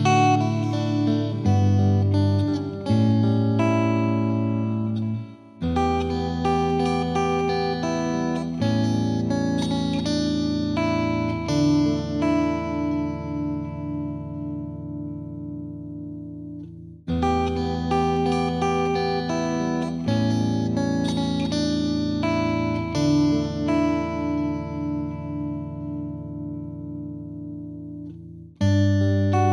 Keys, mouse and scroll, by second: 0.5 space, 0.9-2.5 drag, 2.5 space, 2.9-3.3 drag, 3.3 space, 4.8-5.8 drag, 5.8 space, 6.4-7.5 drag, 7.5-7.9 scroll down 2, 7.9 space, 10.2 middle click, 11.1-11.6 middle drag, 11.6 KP_1, 12.1-12.9 shift+middle drag, 12.9-13.2 scroll up 2, 13.2-13.9 shift+middle drag, 13.9 scroll down 1, 14.1-15.1 middle drag, 15.1-16.7 drag, 17.9-18.4 drag, 18.4-18.9 scroll down 3, 19.1 click, 26.7-29.5 drag.